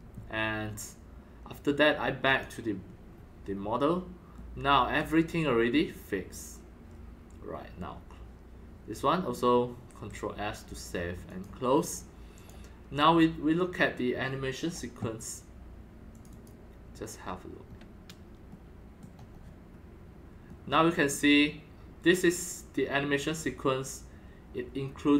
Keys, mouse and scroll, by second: 2.4 click, 3.2-3.5 scroll up 3, 3.5 scroll, 4.3 middle click, 5.0 scroll, 5.2 scroll down 2, 5.3 scroll up 1, 5.4 scroll, 6.2-6.5 scroll down 2, 9.9 ctrl+s, 11.3 click, 12.3 click, 16.1 click, 16.3 click, 17.6 scroll down 2, 18.5 middle click, 19.3 scroll up 1, 19.7 scroll down 1, 19.7-21.2 middle drag.